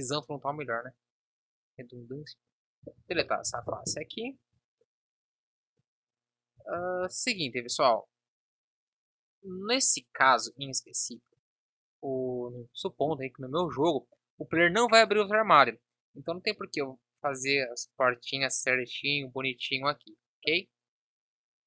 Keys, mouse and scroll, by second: 3.5 Down, 4.5 Tab, 6.7 ctrl+z.